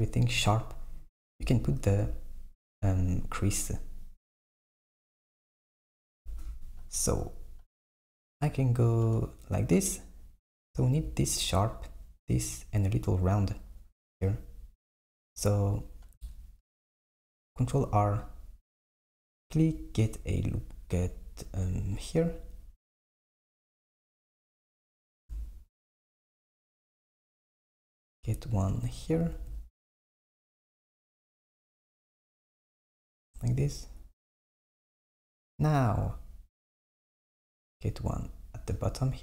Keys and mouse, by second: 1.4 Tab, 1.9 Tab, 6.3 Tab, 8.9-11.9 drag, 16.9 r, 25.2 r, 29.4 r, 36.8 r.